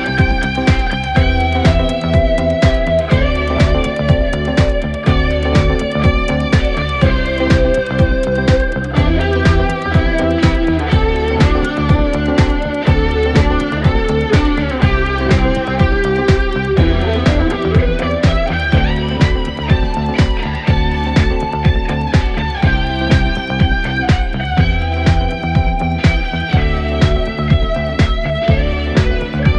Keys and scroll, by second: 2.8 3, 3.3 ], 7.0 Escape, 7.2 ctrl+z, 8.9 ctrl+z, 9.9 ctrl+d, 10.0 Escape, 11.2 ctrl+z, 11.5 4, 13.8 3, 22.0 Delete.